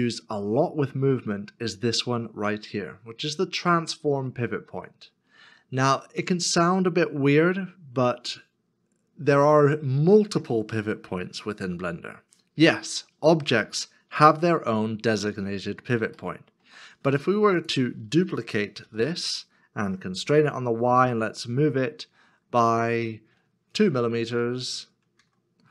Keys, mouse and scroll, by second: 14.3 shift+middle click, 17.2 shift+middle click, 18.8 shift+d, 23.7 F11, 24.9 BackSpace, 25.4 BackSpace.